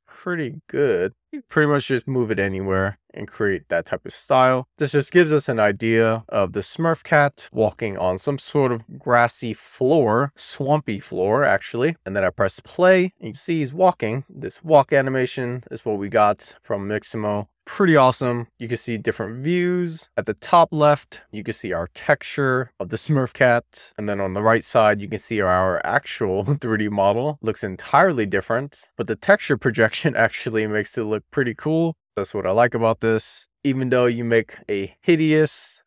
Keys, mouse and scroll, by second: 4.5-5.0 scroll down 1, 5.0 middle click, 5.7-6.6 scroll up 2, 6.6 middle click, 8.0-8.9 scroll down 1, 8.9-10.3 middle drag, 10.7 scroll down 1, 10.8 middle click, 11.9 scroll up 3, 12.0 click, 12.9-14.8 middle drag, 15.2 middle click, 17.0-19.8 drag, 20.8-21.9 shift+middle drag, 24.9 middle click, 26.0-32.1 middle drag, 32.6-33.4 scroll up 1, 33.4 shift+middle click, 34.1 shift+middle click, 34.5 shift+middle click, 35.0 middle click.